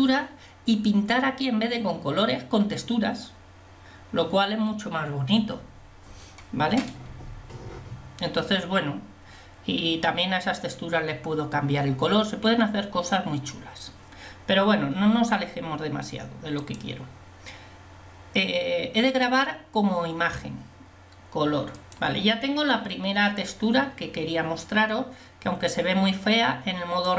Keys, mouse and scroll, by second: 22.2 click.